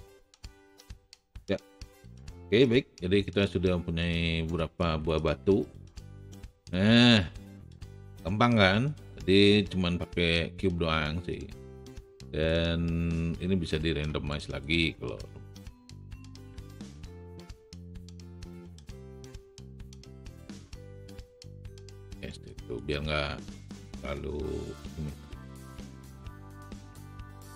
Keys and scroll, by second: 16.8 w, 17.4 shift+w, 26.8 r.